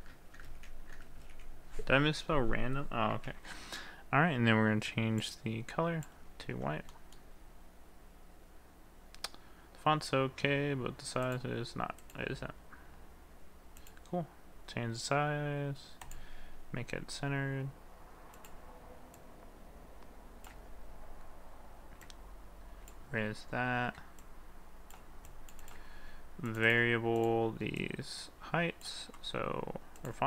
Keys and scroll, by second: 3.3 ctrl+a.